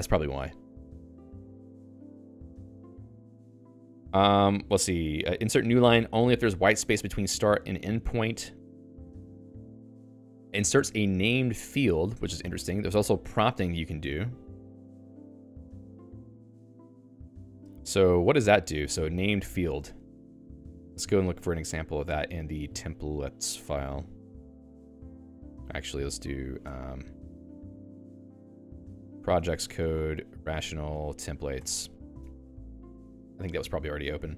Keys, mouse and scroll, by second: 1.1 Escape, 19.8 Escape, 22.4-23.5 typing, 24.4 ctrl+g, 25.2 ctrl+f, 26.6-31.9 typing.